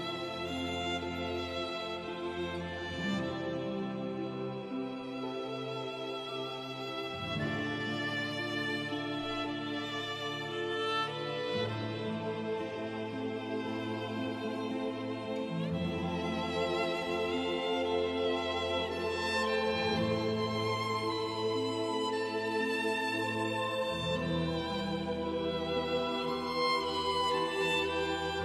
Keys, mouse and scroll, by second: 1.1 click, 5.2-5.5 scroll up 1, 10.6 click, 12.0-12.8 scroll down 1, 14.3 t, 15.6-16.6 scroll down 1, 16.6 F3, 18.1-20.5 scroll up 1, 21.4 click, 22.4-23.0 scroll down 1.